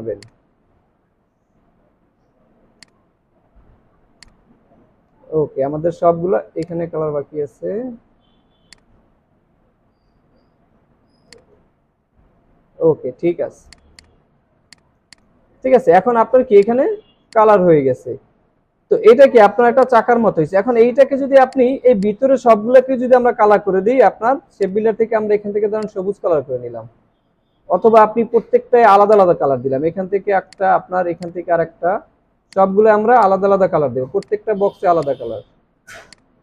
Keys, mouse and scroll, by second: 9.5-10.4 alt+scroll up 1, 10.4 alt+scroll down 1, 11.0 space, 11.3 alt+scroll down 1, 11.5 space, 11.8 alt+scroll up 3, 12.6 alt+scroll down 1, 14.0 double click, 14.4 alt+scroll down 1, 15.6 alt+scroll up 1, 16.3 alt+scroll down 1, 21.2 ctrl+z.